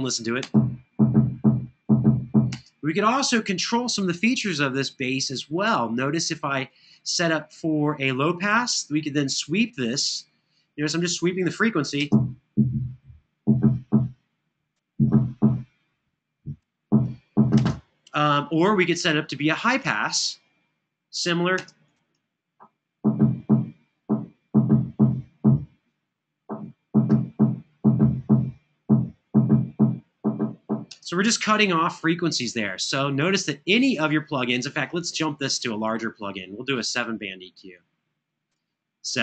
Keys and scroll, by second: 0.1 space, 4.3 space, 11.7 space, 17.4 space, 21.3 space, 30.7 space.